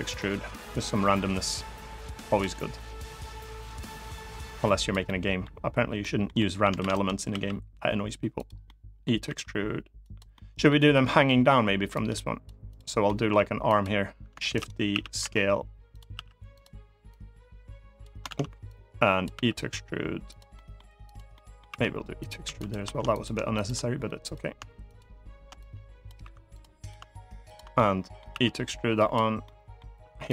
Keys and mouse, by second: 0.0-2.1 drag, 2.2 middle click, 2.8 click, 3.9 click, 4.8 middle click, 5.7 middle click, 6.1 middle click, 6.5 shift+d, 6.6 click, 7.0 s, 8.1 click, 8.4 middle click, 9.0 e, 9.7 click, 10.0 middle click, 10.6 middle click, 11.0 middle click, 11.7 click, 12.4 click, 12.8 middle click, 13.5 click, 14.2 shift+d, 14.6 s, 14.9 y, 15.6 click, 15.9 s, 16.2 click, 16.8 click, 18.1 ctrl+z, 18.4 click, 19.1 e, 20.0 click, 20.3 middle click, 20.8 click, 21.0 middle click, 21.4 e, 21.9 click, 22.1 2, 22.3 click, 22.8 click, 23.2 shift+click, 23.9 click, 24.6 shift+click, 25.4 click, 25.9 3, 26.2 click, 27.2 shift+click, 27.5 middle click, 28.0 e, 28.7 click, 29.1 middle click, 30.0 click.